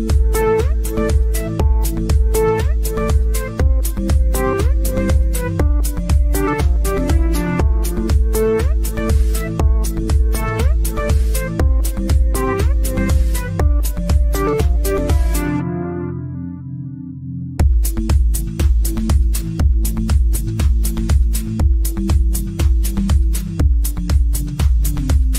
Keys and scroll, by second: 9.7 ctrl+z, 20.5 KP_Add.